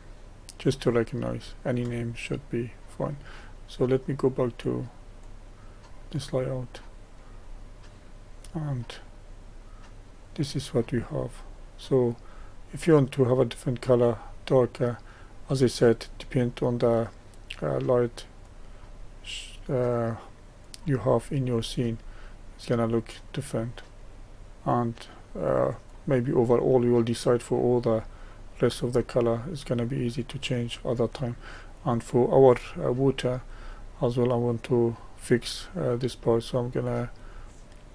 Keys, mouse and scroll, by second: 2.2-5.4 middle drag, 5.4 click, 6.5-11.7 middle drag, 11.7-12.4 scroll up 1, 12.4-18.5 middle drag, 18.5-20.7 drag, 22.0-25.9 middle drag, 25.9 click, 26.6-31.9 middle drag, 31.9 click, 32.6-37.0 middle drag, 37.0 click, 37.4-37.9 middle drag.